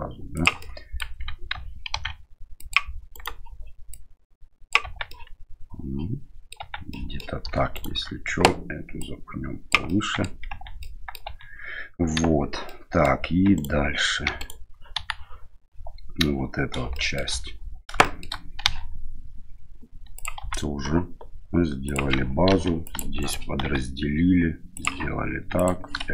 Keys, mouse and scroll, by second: 0.6 middle click, 1.9 ctrl+r, 3.9 click, 4.8 Tab, 5.1-6.5 middle drag, 6.6 Tab, 6.9 middle click, 7.7 alt+right click, 9.0 click, 9.9 middle click, 10.5 Tab, 10.8 middle click, 11.2 Tab, 12.1 KP_1, 12.6 middle click, 13.5 right click, 14.2 3, 14.4 right click, 14.9 KP_1, 16.9 shift+middle click, 18.0 shift+middle click, 18.6 e, 20.4 s, 22.5 ctrl+r, 23.6 s, 25.6 click.